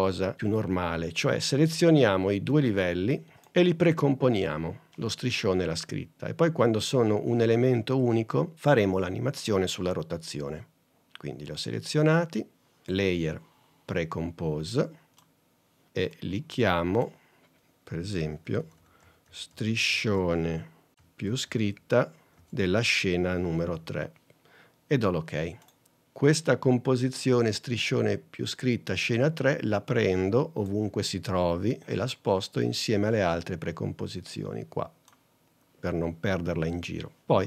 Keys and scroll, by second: 18.5 s.